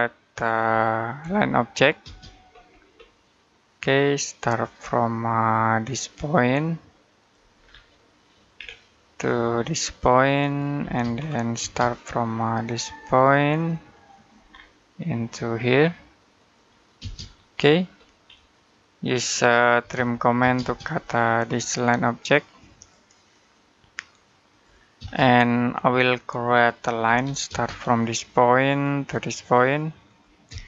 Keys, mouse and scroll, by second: 1.0 l, 1.9 space, 2.3-2.9 scroll up 1, 7.0 click, 7.4-7.8 scroll down 1, 7.8 middle click, 8.4-10.3 scroll down 1, 10.3 click, 10.6 space, 11.0-11.4 scroll up 1, 11.4 space, 14.0 click, 14.3 scroll down 1, 16.2 click, 16.8 space, 17.3 middle click, 17.8 scroll up 1, 19.6-20.2 typing, 20.8 click, 24.8 space, 25.4 middle click, 25.7-26.2 scroll up 1, 26.2 middle click, 26.9 l, 27.3 space, 28.5 click, 30.3-30.6 typing.